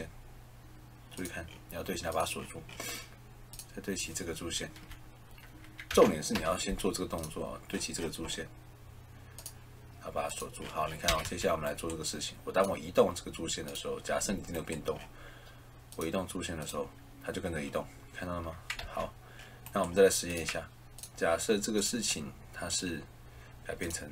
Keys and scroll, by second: 4.6 Escape, 5.8 a, 6.2 l, 11.0 Escape, 18.7 ctrl+z.